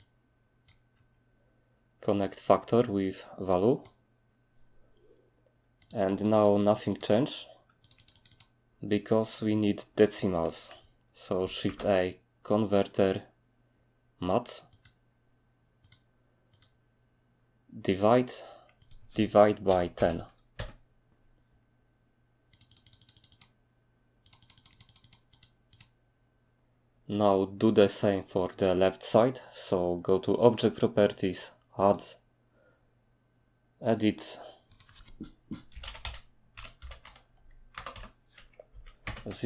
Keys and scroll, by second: 35.8-39.4 typing, 38.7 Tab.